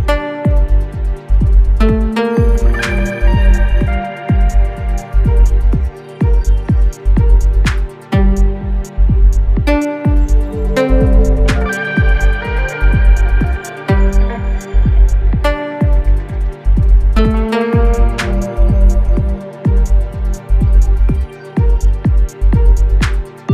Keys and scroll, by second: 1.2 i, 2.0 v, 11.1 a, 14.6 Left, 18.2 Right, 20.3 v.